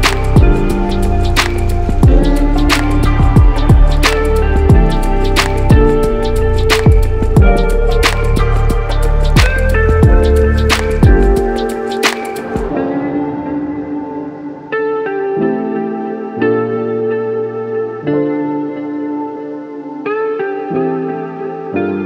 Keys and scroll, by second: 10.9 Down, 11.4 Up, 11.6 Up.